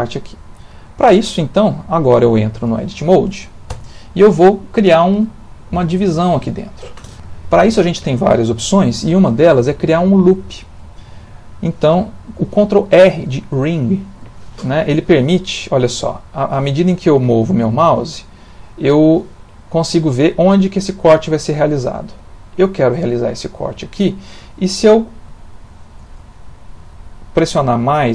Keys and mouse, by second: 0.3 shift+middle click, 0.7 middle click, 1.2 ctrl+middle click, 1.8 shift+middle click, 2.3 ctrl+middle click, 3.7 Tab, 14.2 ctrl+r.